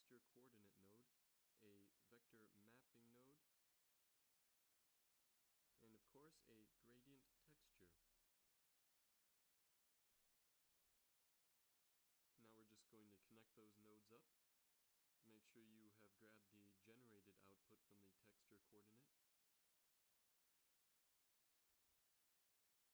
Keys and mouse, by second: 1.8 shift+a, 6.9 shift+a, 15.0 click, 16.9-17.7 middle drag.